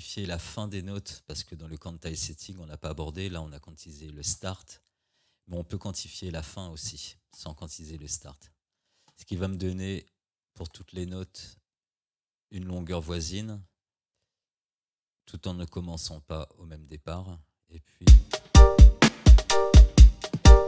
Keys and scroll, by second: 18.1 space.